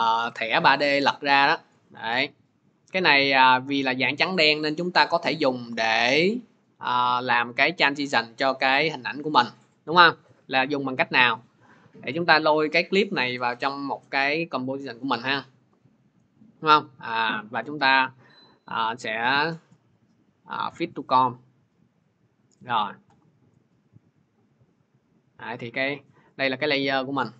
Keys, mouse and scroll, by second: 11.2 click, 14.5 click, 15.5 middle click, 18.7 right click, 19.5 scroll, 21.0 click, 22.0 middle click, 22.7-23.4 scroll.